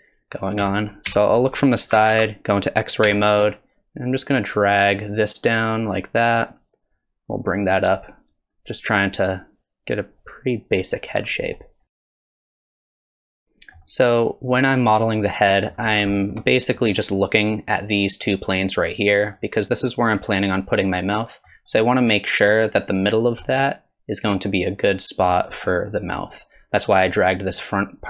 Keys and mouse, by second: 1.1 KP_3, 2.1 alt+z, 3.0 1, 3.4 click, 4.4-5.5 drag, 6.0 click, 7.0 click, 8.3 click, 9.2-11.2 drag, 11.9 click, 12.0 click, 12.2 middle click, 12.4 KP_1, 12.5 alt+z, 12.8 s, 13.0 click, 13.2 2, 13.3 s, 13.4 click, 13.9-15.7 drag, 16.1 shift+click, 16.5 middle click, 19.3-21.5 middle drag, 23.5-25.3 middle drag, 25.9 middle click, 27.0 click, 27.7 click.